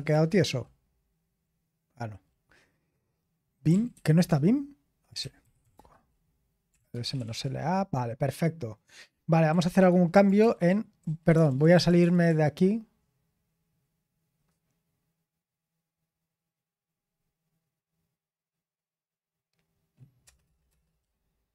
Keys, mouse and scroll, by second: 0.1 typing, 3.4-7.7 typing, 9.2-12.3 typing, 20.2 Return, 20.4 typing.